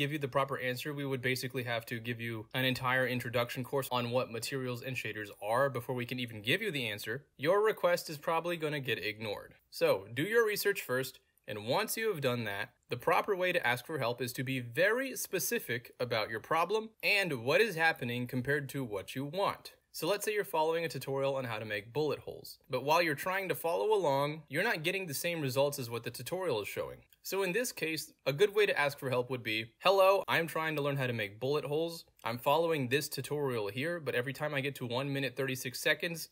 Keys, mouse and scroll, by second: 1.7 middle click, 1.7 scroll down 2, 4.3 scroll down 2, 6.0-6.8 scroll down 1, 6.8-7.1 scroll down 1, 7.7-8.4 scroll down 2, 9.9-10.2 scroll down 2, 11.1-12.5 scroll down 2, 11.9 middle click, 12.5-13.0 scroll down 1, 13.0-14.0 scroll down 1, 14.0-16.0 scroll down 1, 16.0-16.8 scroll down 1, 16.8-17.5 scroll down 1, 17.5-18.1 scroll down 1, 18.1-19.7 scroll down 1, 19.7 click, 25.3 ctrl+z, 26.5 click, 28.0-28.4 scroll up 1, 28.4 click, 29.4 click, 30.0-33.8 typing, 33.6 click, 34.0 ctrl+v, 34.2 click, 36.0 drag.